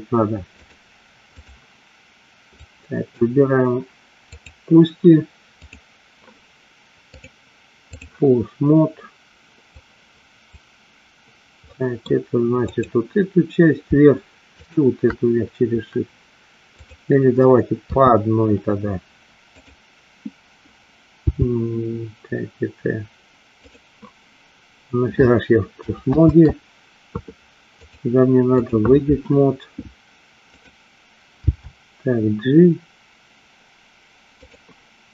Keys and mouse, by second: 0.6-1.6 drag, 2.8 click, 4.4 click, 7.3 click, 10.0 click, 11.8 middle click, 14.6 shift+click, 18.0 KP_3, 21.5 g, 26.4 ctrl+z, 28.0 click, 30.5 click, 31.5 g.